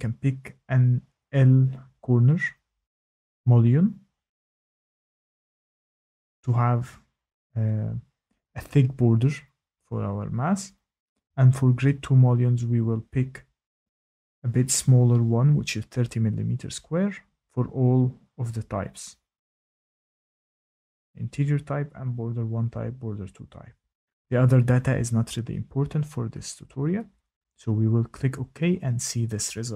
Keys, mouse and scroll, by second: 2.9 click, 5.8-6.4 scroll, 6.6-7.8 scroll, 7.8 scroll, 8.9-9.4 scroll, 13.3 click, 17.3 click, 20.4 click, 21.3 click, 21.4-23.9 scroll, 21.6 click, 21.7 click, 22.0 click, 27.3 scroll, 27.6 click.